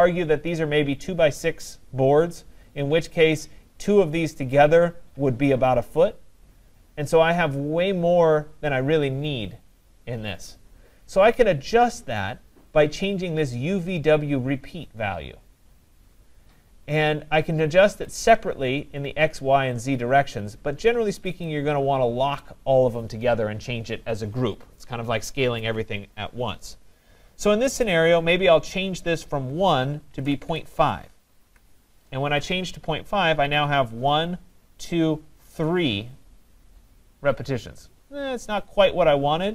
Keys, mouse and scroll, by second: 18.1 click, 21.5 click, 26.5 click, 28.0-33.1 drag, 30.0-31.0 typing, 31.5 Tab.